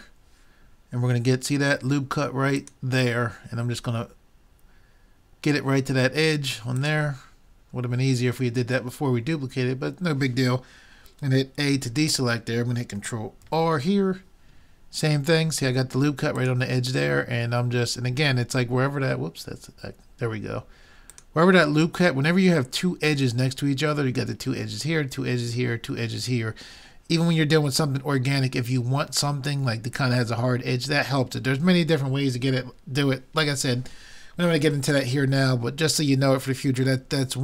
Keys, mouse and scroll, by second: 11.7 a, 13.5 ctrl+r.